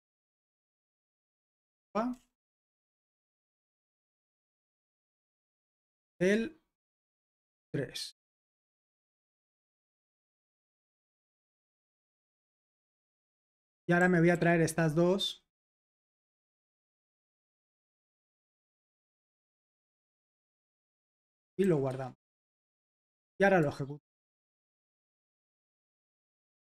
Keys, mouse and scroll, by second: 0.0-3.9 typing, 6.2 typing, 7.4 typing, 9.2-10.2 typing, 12.2 typing, 13.2 Escape, 13.7-14.4 typing, 15.9-17.0 typing, 18.2-19.8 typing, 21.7-22.4 typing, 22.6 super+h, 23.6 ctrl+`, 24.7 ctrl+p, 25.0 ctrl+p, 25.6 ctrl+n, 26.0 Return.